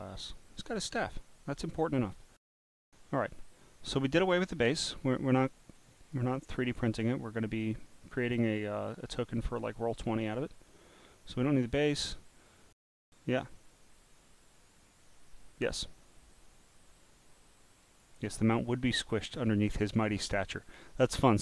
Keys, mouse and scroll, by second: 0.0 click, 0.7 scroll up 1, 3.9 click, 5.4 click, 6.0 click, 6.6 click, 7.2 click, 7.9 scroll up 4, 8.4 click, 11.5 click, 16.2-18.0 drag.